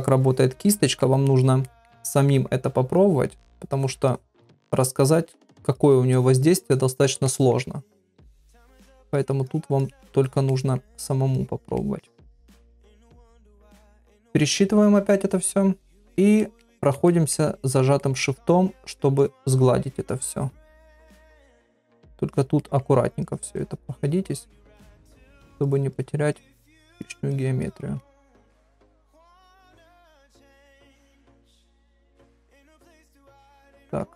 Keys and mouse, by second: 0.2 click, 0.7 middle click, 1.7 ctrl+middle click, 3.0 click, 3.4 click, 3.7 click, 4.1 click, 4.4 middle click, 5.4 click, 5.8 click, 6.1 click, 6.4 click, 6.7 middle click, 7.2 shift+middle click, 8.0 click, 8.4 click, 8.6 click, 9.1 click, 9.5 click, 9.8 click, 10.2 click, 10.5 middle click, 11.4 click, 11.8 shift+middle click, 13.1 click, 13.4 click, 15.4 ctrl+r, 15.8 middle click, 16.4 middle click, 16.7 shift+middle click, 17.1 middle click, 18.0 middle click, 18.8 shift+click, 19.2 shift+click, 19.5 shift+click, 19.9 shift+click, 20.5 shift+click, 20.9 shift+click, 21.9 shift+click, 22.3 shift+click, 22.6 middle click, 23.2 shift+click, 23.6 shift+click, 23.9 shift+click, 24.3 shift+middle click, 24.7 middle click, 25.3 shift+click, 25.7 shift+click, 25.9 shift+click, 26.3 shift+click, 26.7 shift+click, 27.0 shift+click, 27.3 shift+click, 27.6 shift+click, 28.0 middle click, 28.8 shift+click, 29.1 shift+click, 29.7 shift+click, 29.9 shift+click, 30.2 middle click, 30.9 shift+click, 31.3 shift+click, 31.6 shift+click, 32.0 shift+click, 32.3 shift+click, 32.6 middle click, 33.4 shift+click, 33.7 shift+middle click.